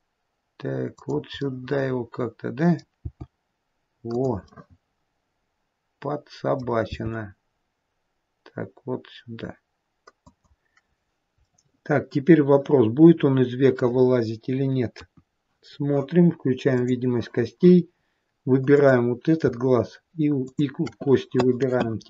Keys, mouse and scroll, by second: 1.7 middle click, 3.3 g, 4.8 middle click, 7.1 g, 11.3-12.7 scroll down 2, 11.7 middle click, 15.2 KP_1, 15.9-17.0 scroll down 2, 17.0 click, 18.2-19.0 scroll up 2, 19.0 click, 20.7 shift+click.